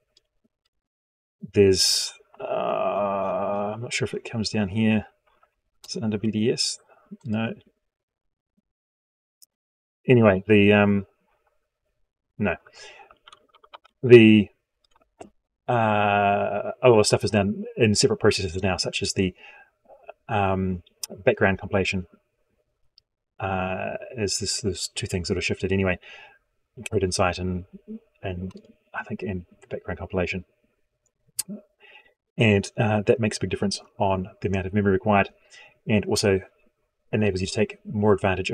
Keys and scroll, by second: 13.8 ctrl+Home.